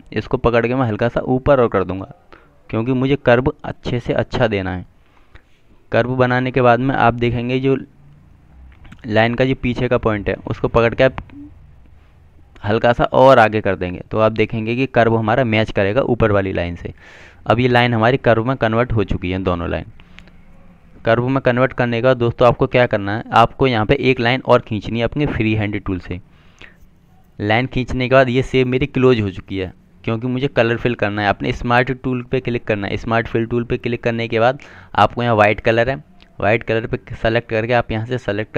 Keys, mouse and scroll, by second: 11.3 click, 24.6 click, 33.7 click, 37.4 click.